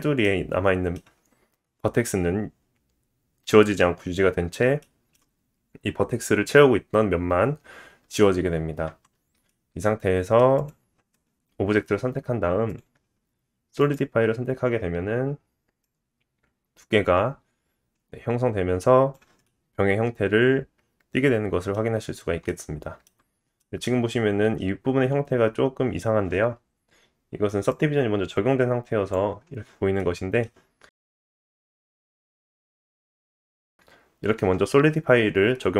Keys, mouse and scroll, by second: 0.2 middle click, 4.8 shift+middle click, 8.8 Tab, 9.5 middle click, 10.6 click, 12.7-15.8 drag, 12.7-15.8 middle drag, 12.7-15.8 right drag, 19.4 middle click, 20.4-23.4 middle drag, 23.2 scroll up 1, 23.6-26.6 shift+middle drag, 27.7 click, 29.1-30.8 drag, 30.0 middle click, 31.9 click, 32.5-35.6 drag, 32.5 middle click.